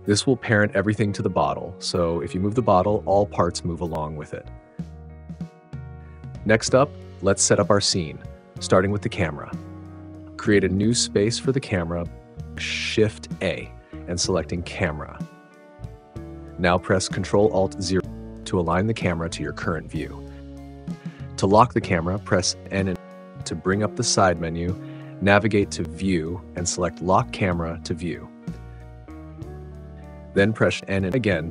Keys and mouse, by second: 0.6 alt+z, 2.4 click, 4.2 g, 8.5 click, 9.5 click, 12.5 shift+a, 14.4 shift+a, 18.2 ctrl+alt+KP_0, 22.3 n, 27.0 click, 28.6 click, 30.4 n.